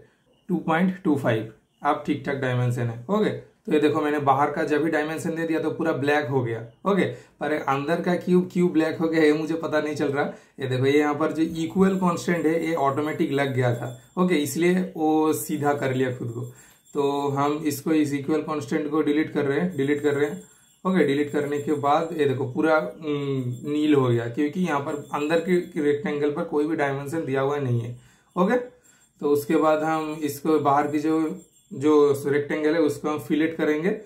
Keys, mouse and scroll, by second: 1.2 super+click, 3.1 super+Return, 10.3 super+Return, 13.2 super+scroll up 1, 13.7 super+scroll down 1, 16.2 super+scroll up 1, 16.4 super+click, 19.7 super+Delete, 21.3 super+click, 23.8 typing, 26.6-30.4 super+middle drag, 30.4 super+click.